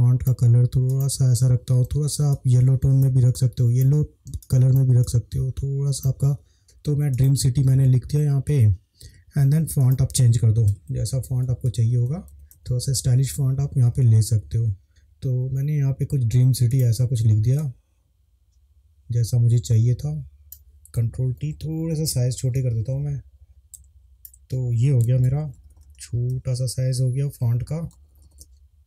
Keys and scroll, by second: 11.1 Up, 11.1 Up, 11.3 Up, 11.5 Up, 11.8 Up, 12.1 Up, 12.3 Up, 12.6 Up, 13.2 Up, 14.0 Up, 14.8 Down, 21.4 ctrl+t, 25.2 Up, 25.4 Up, 25.5 Up, 25.7 Up, 25.9 Up, 26.0 Up, 26.3 Right, 27.9 Up.